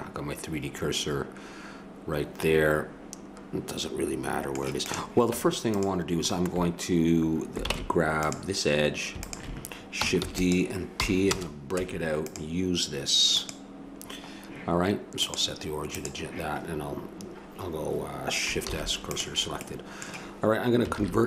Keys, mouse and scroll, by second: 4.9 click, 5.3 Tab, 7.7 ctrl+Tab, 10.2 shift+d, 11.0 p, 11.8 Tab, 18.7 shift+s, 20.9 alt+c.